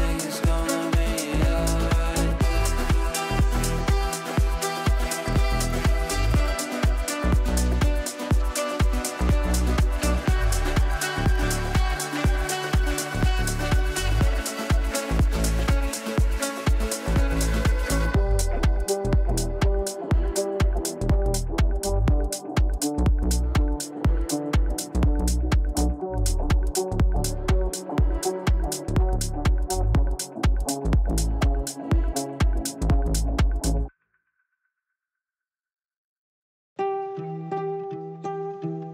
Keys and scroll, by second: 21.6 g.